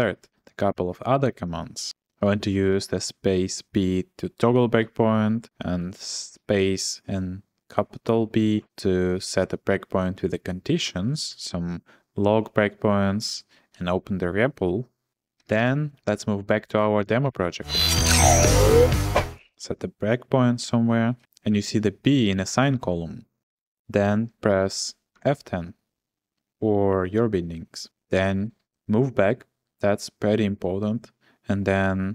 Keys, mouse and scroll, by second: 4.5 typing, 5.6 j, 8.3 j, 11.3 j, 13.7 j, 15.2-16.1 typing, 19.3 j, 25.1 F10, 28.6 ctrl+h.